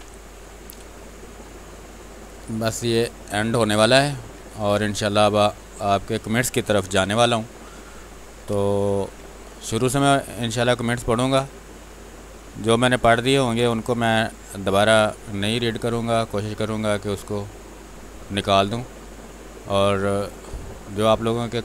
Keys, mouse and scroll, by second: 0.1 click, 1.1 ctrl+click, 3.4 shift+space, 3.8 ctrl+click, 6.8 r, 7.1 click, 8.5 space, 8.7 ctrl+click, 10.4 click, 18.0 space, 18.2 click, 18.5 space, 19.2 click, 20.8 click.